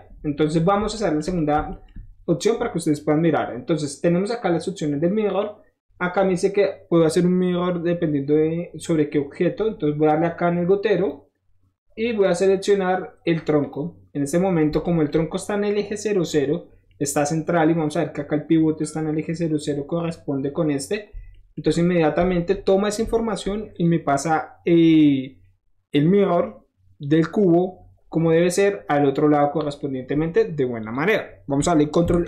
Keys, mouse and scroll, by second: 0.9 shift+middle drag, 1.3 shift+middle click, 10.9 click, 13.6 click, 14.8-15.1 shift+middle drag, 15.2 shift+middle drag, 15.5 scroll up 3, 16.2 shift+click, 16.6 scroll up 1, 16.9-17.3 shift+middle drag, 17.5-21.2 middle drag, 22.2-22.9 shift+middle drag, 23.7 shift+click, 29.2 middle drag, 30.8 click, 32.0 ctrl+s.